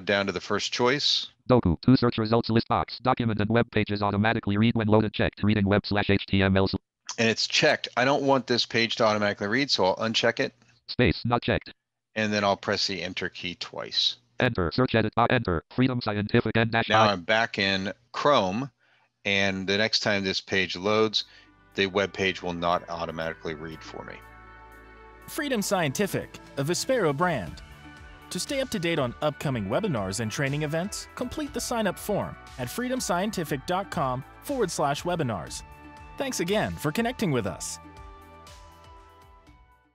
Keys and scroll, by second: 12.9 Return.